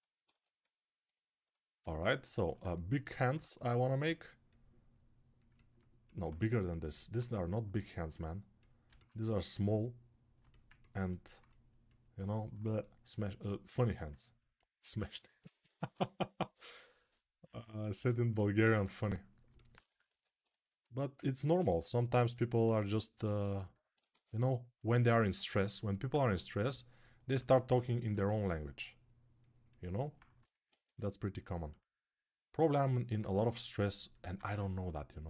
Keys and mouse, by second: 6.9-18.4 right drag, 15.4 1, 19.9 ctrl+r, 22.7 g, 23.9 ctrl+z, 28.0 2, 30.6 3, 33.6-35.2 alt+right drag, 34.2 1.